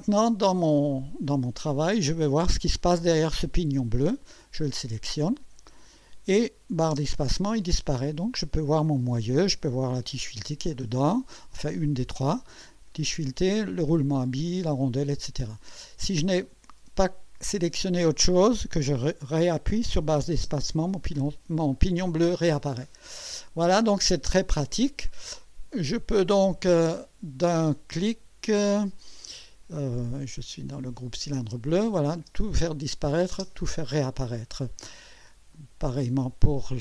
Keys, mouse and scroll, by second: 4.4 click, 6.9 space, 7.9-9.7 drag, 9.8 scroll up 1, 10.8-14.0 drag, 20.4 space, 22.6 scroll down 2, 23.3 click, 25.0 scroll up 2, 26.3 click, 30.7 click, 31.7 click, 32.1 space, 33.3 space, 35.5 click.